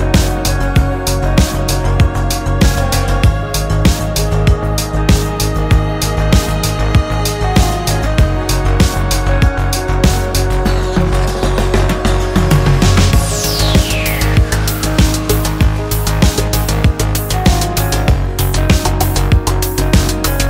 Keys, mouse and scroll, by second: 0.0 KP_4, 1.4 click, 2.5 click, 5.2 click, 6.4 click, 7.3 click, 8.9 click, 11.2 click, 12.4-14.3 drag, 14.6 click, 15.7-17.2 middle drag, 17.2 scroll up 1, 18.6 click.